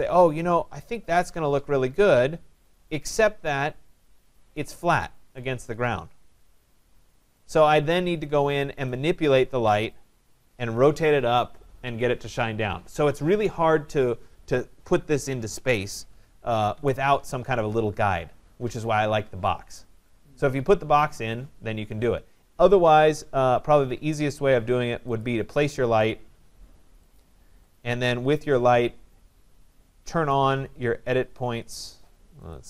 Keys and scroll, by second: 16.3 Delete.